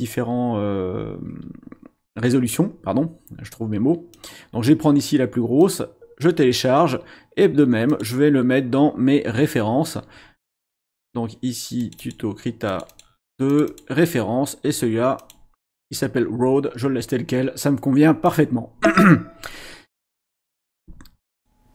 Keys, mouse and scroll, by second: 4.1 click, 5.6 click, 7.9 click, 10.8 click, 11.8 click, 12.6 click, 13.5 click, 15.2 click, 18.2 click, 21.4 click.